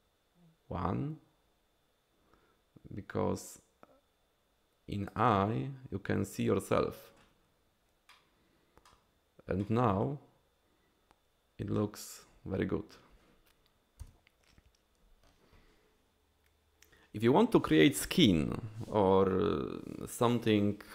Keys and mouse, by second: 8.1-8.9 drag, 9.6-11.8 middle drag, 14.1 KP_1.